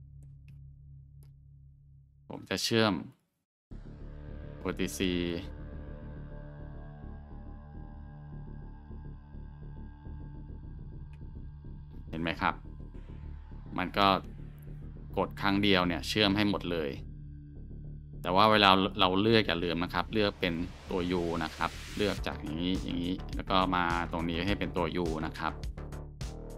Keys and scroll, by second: 0.5 ctrl+x, 2.6 Tab, 7.3 alt+shift+1, 11.6 ctrl+alt+shift+1, 25.6 Tab, 25.9 scroll.